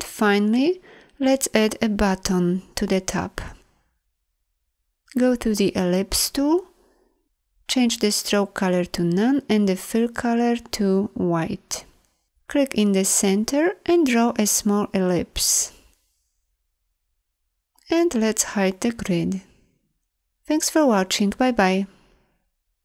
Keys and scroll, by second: 4.7 l, 18.4 ctrl+'.